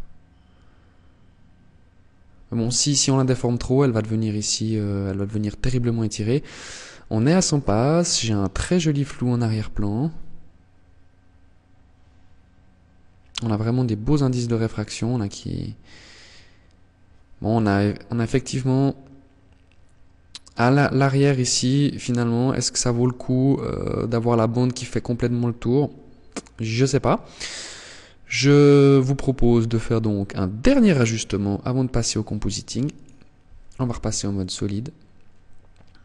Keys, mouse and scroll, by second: 30.5 click, 32.9 ctrl+s, 35.1 right click.